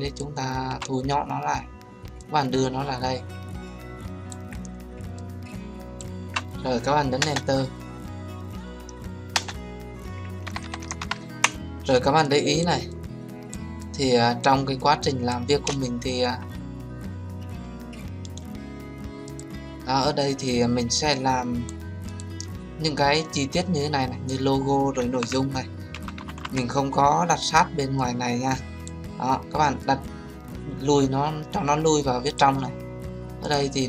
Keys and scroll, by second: 7.1 Return.